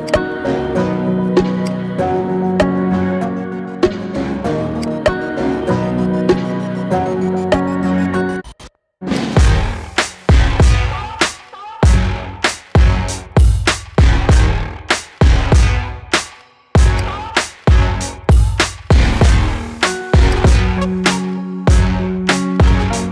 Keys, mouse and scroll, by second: 1.0-1.6 scroll down 2, 1.6 click, 2.5-3.2 scroll up 1, 3.2 shift+a, 5.9 /, 6.8 KP_1, 7.1 scroll down 3, 7.3-8.5 shift+middle drag, 8.5 s, 9.3-9.9 scroll up 2, 9.9 Tab, 10.6-12.3 shift+middle drag, 12.3 click, 13.0 KP_1, 13.9 e, 17.0-17.4 scroll up 2, 17.4-18.9 shift+middle drag, 18.9 g, 21.0 middle click, 21.4 e.